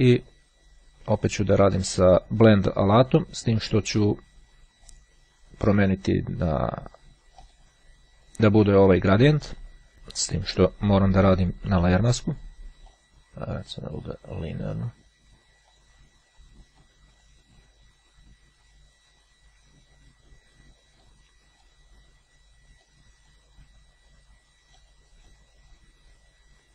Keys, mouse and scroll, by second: 0.0 click, 2.1 click, 2.9 click, 4.7-5.1 scroll up 1, 7.5 click, 9.9 ctrl+z, 10.7 click, 11.5 click, 13.0 click, 13.9-16.5 drag, 17.0-18.2 drag, 21.2-22.3 drag, 23.0 click, 24.9-25.9 drag.